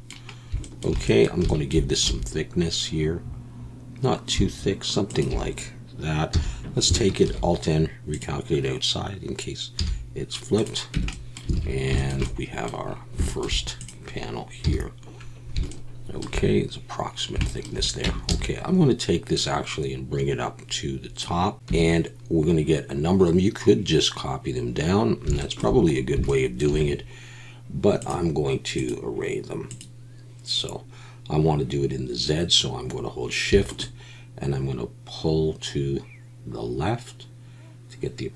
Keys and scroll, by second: 2.0 e, 6.3 a, 7.2 alt+n, 9.8 z, 10.9 Tab, 11.5 alt+a, 14.6 KP_1, 18.0 Tab, 18.3 a, 21.7 Tab.